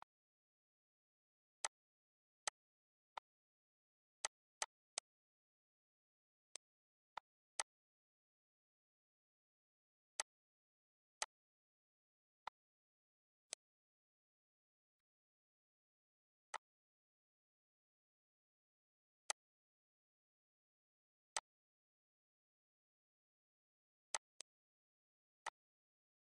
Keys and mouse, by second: 1.4 click, 2.2 click, 2.9 click, 4.0 click, 6.3 click, 6.9 click, 8.7 ctrl+d, 10.0 click, 11.0 click, 12.2 click, 13.3 click, 14.8 click, 16.3 click, 19.0 click, 21.1 click, 23.9 click, 25.2 click, 26.1 click.